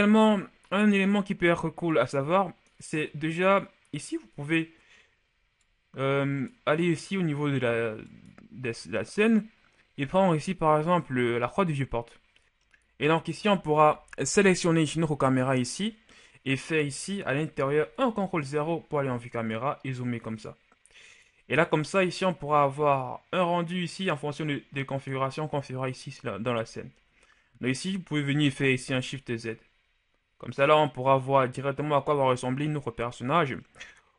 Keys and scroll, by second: 17.7 ctrl+KP_0, 28.7 shift+z.